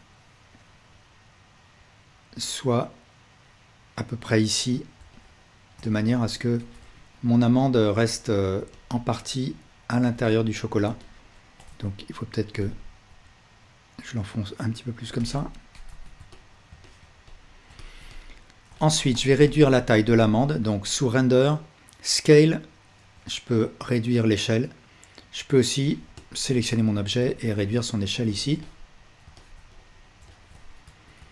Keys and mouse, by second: 6.8 Tab, 7.3-7.9 alt+drag, 11.7 Tab, 15.9 Tab, 17.2-17.7 alt+drag, 26.5 Tab, 27.2 s, 28.3 Tab, 28.7-31.2 alt+drag, 31.2 Tab.